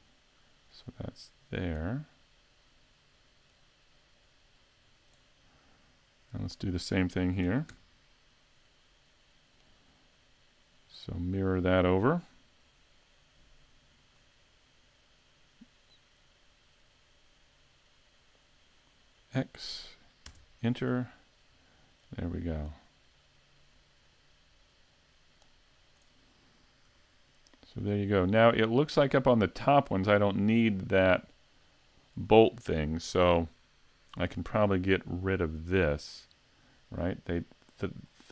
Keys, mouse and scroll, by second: 0.9 click, 6.3 right click, 7.5 shift+d, 11.2 click, 14.6 click, 16.1 click, 22.0 click, 26.9 a, 27.9 scroll up 2, 28.5 middle click, 29.6-30.3 scroll down 2, 30.3 scroll up 1, 33.8 scroll up 1, 37.1 middle click, 38.1-38.3 scroll up 2.